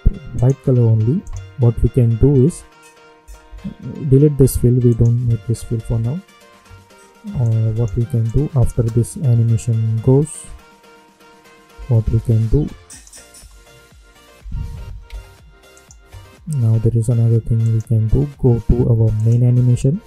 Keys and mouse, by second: 3.2 space, 4.8 click, 8.7 space, 11.7 space, 12.8 click, 13.3 space, 15.7 click.